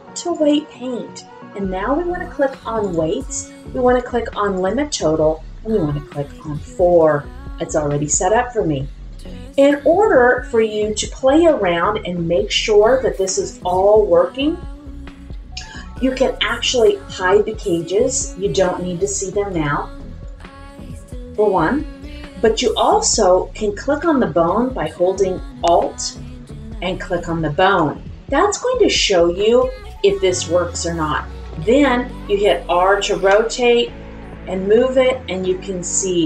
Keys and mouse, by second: 2.9-4.7 drag, 6.3 click, 19.5 click, 20.2 click, 27.0 alt+click, 31.4 middle click, 33.3 r, 35.3-36.2 drag.